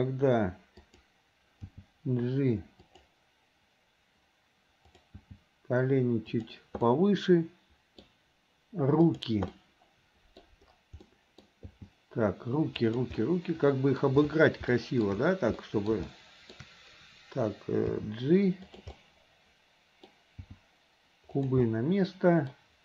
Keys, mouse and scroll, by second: 0.8 r, 1.8 g, 4.9 click, 5.9 g, 6.9-8.0 middle drag, 9.1 click, 9.5 middle click, 11.1 middle click, 13.1 g, 13.2-14.0 scroll up 1, 14.0-14.4 scroll down 1, 14.8 shift+scroll up 1, 14.9 shift+middle click, 15.1 shift+scroll down 1, 15.6-15.9 middle drag, 16.1-16.6 shift+middle drag, 19.0-20.5 middle drag, 19.0 g, 20.5 g, 21.7-22.7 middle drag.